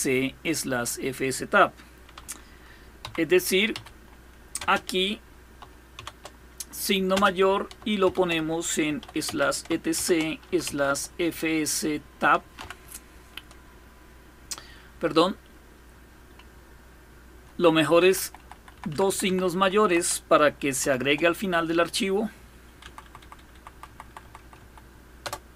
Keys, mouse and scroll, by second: 0.0-1.2 scroll down 2, 2.7 Up, 3.4 Up, 4.2 space, 5.6 shift+., 6.7-12.7 typing, 17.0 BackSpace, 17.2 Left, 17.4 Left, 17.9 Left, 18.1 Left, 18.2 Left, 18.4 Left, 18.6 Left, 18.7 Left, 18.9 Left, 19.4 Right, 20.5 shift+., 20.7 shift+>, 22.5 Right, 22.7 Right, 22.8 Right, 23.0 Right, 23.2 Right, 23.3 Right, 23.5 Right, 23.7 Right, 23.9 Right, 24.1 Right, 24.2 Right, 24.9 Return.